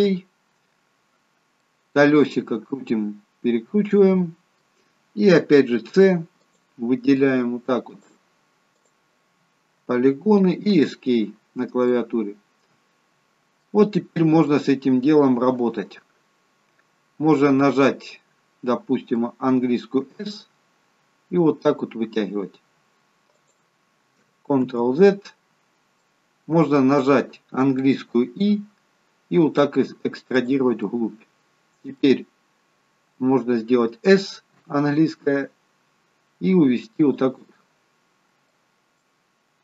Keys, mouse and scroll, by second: 1.7 middle click, 11.4-13.7 scroll down 2, 11.9 middle click, 14.0-14.9 scroll up 2, 14.5 middle click, 24.6 ctrl+z, 26.1 middle click, 28.3 i, 31.1 middle click, 37.6 middle click, 37.6 s, 39.2 middle click.